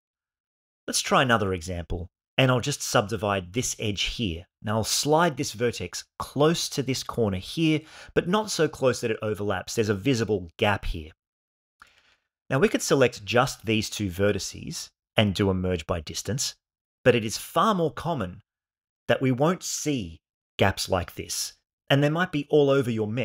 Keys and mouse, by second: 0.3 click, 1.1 shift+right click, 2.3 right click, 3.8 click, 5.0 g, 5.5 x, 7.9 click, 11.7-12.3 shift+middle drag, 13.6 click, 14.1 shift+click, 15.5 m.